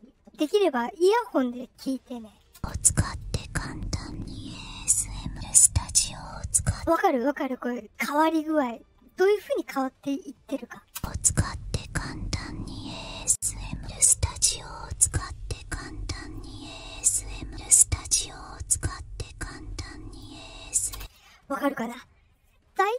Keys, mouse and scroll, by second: 2.5 space, 3.3-6.6 drag, 6.7 space, 8.2-9.3 drag, 10.9 space, 11.8-16.3 drag, 16.9-20.1 drag, 20.9 space.